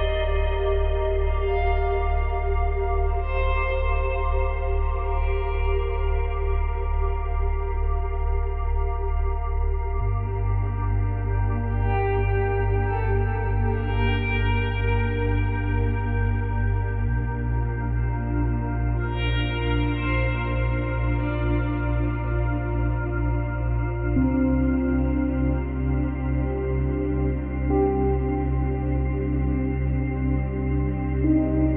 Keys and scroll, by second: 15.1 F8, 16.0 F9.